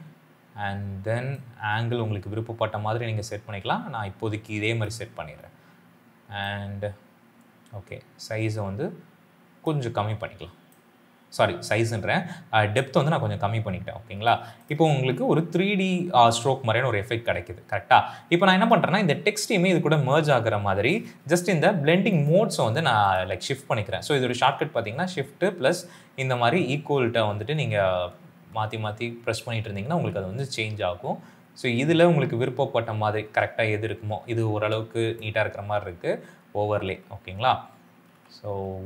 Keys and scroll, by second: 24.5 shift+=, 28.7 shift+=, 30.1 shift+=, 30.3 shift+=, 32.3 shift+=, 33.1 shift+-, 35.6 shift+=, 37.1-38.0 typing.